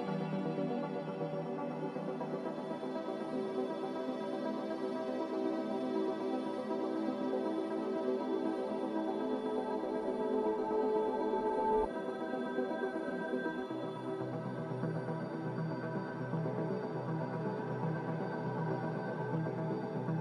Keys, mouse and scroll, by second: 3.6 x, 5.3 z, 6.6-7.5 typing, 12.1-13.0 typing, 18.9 a.